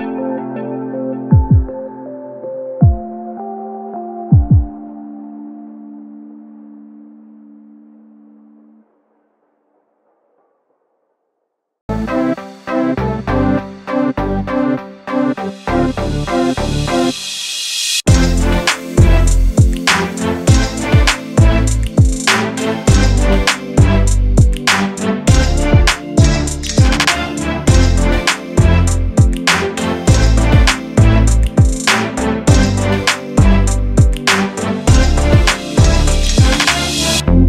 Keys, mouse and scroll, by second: 0.4 click, 0.8-1.2 scroll up 1, 1.2 Tab, 2.2 Tab, 2.7-4.4 drag, 4.4-4.9 scroll down 1, 5.0 click, 5.3 scroll up 1, 5.5 Tab, 5.6 middle click, 6.2 click, 6.9 middle click, 7.7 click, 8.2 click, 8.7 alt+click, 9.3 e, 10.1-11.6 middle drag, 12.2 click, 12.5 scroll up 2, 12.8-13.9 middle drag, 13.9 click, 14.2-14.5 scroll down 2, 14.5 shift+middle click, 15.2 click, 15.8 Tab, 16.5-17.7 drag, 18.9 click, 19.5 click, 20.2-20.8 scroll down 1, 20.8 shift+click, 21.4 g, 22.4 scroll down 1, 22.6 click, 23.0-23.4 scroll up 2, 23.4 scroll down 1, 24.0 click, 24.5 g, 25.9 click, 26.2 shift+click, 26.7 shift+d, 28.5-29.4 scroll down 1, 29.4 shift+d, 32.4 click, 32.9 g, 34.0 click, 34.8 s, 35.7 g, 36.5-37.4 scroll up 1.